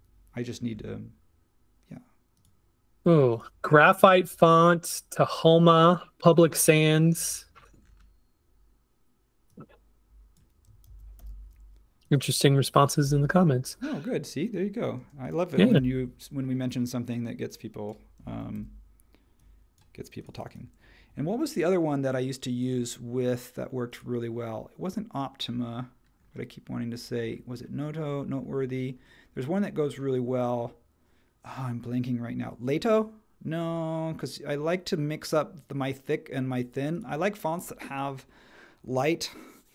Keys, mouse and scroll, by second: 10.8 super+c, 11.2 super+h, 13.0 Escape, 15.0 space, 15.8 t, 18.5 super+v.